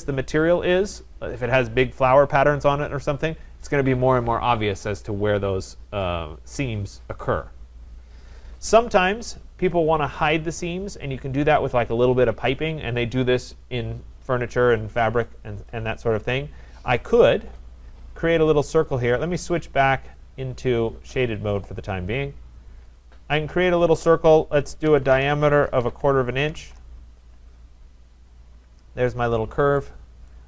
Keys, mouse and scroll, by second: 17.9 click, 20.3 click, 21.1 click, 23.0 click, 24.9-27.0 typing, 25.1 Return, 28.3 click, 29.4 Return, 29.4 click, 30.3 right click.